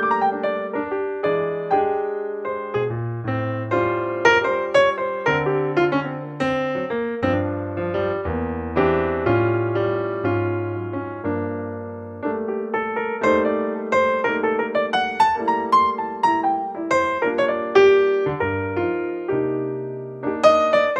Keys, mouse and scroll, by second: 0.1-1.8 drag, 1.8 alt+g, 3.1 s, 5.5 click, 6.7 e, 7.9 g, 10.7-12.2 drag.